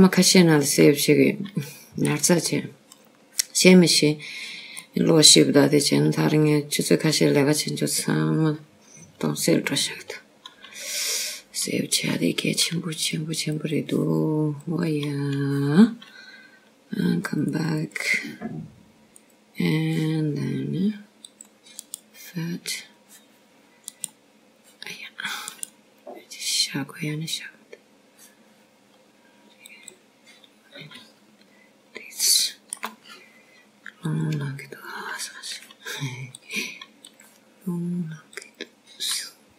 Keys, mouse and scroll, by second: 0.2-1.0 scroll down 1, 1.8 shift+middle click, 3.2 click, 3.9 middle click, 6.9-7.3 scroll down 1, 7.6 middle click, 7.6-8.5 scroll down 1, 8.5-9.2 scroll up 1, 9.2 scroll up 2, 9.9-10.4 scroll down 2, 13.7-16.0 scroll up 1, 16.0 click, 17.5 click, 18.2-20.1 scroll down 1, 20.1 click, 20.5 click, 20.7 click, 22.1 click, 23.4-24.2 scroll up 1, 24.2 click, 24.7 right click, 24.8 right click, 26.8 right click, 26.9 right click, 28.4 right click, 28.5 right click, 33.5-34.0 scroll up 1, 35.1 shift+middle click, 36.9 click, 39.2 click.